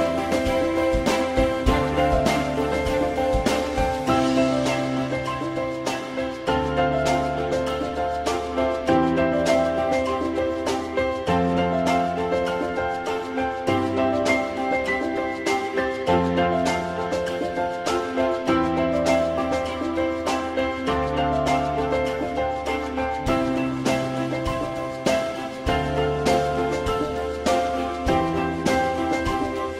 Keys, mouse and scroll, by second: 7.1 shift+double click, 14.9 shift+click, 19.2 shift+click, 22.9 alt+middle click, 26.2 alt+middle click, 27.4 alt+middle click.